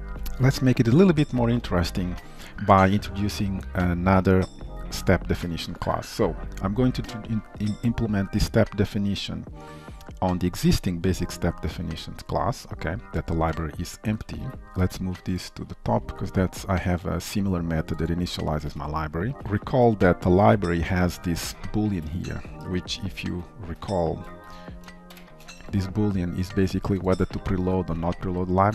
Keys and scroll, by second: 14.4 Escape, 14.6 ctrl+y, 18.7 ctrl+v, 19.4 ctrl+c, 20.3 ctrl+v, 21.0 ctrl+s, 23.4 ctrl+q, 25.9 ctrl+shift+i.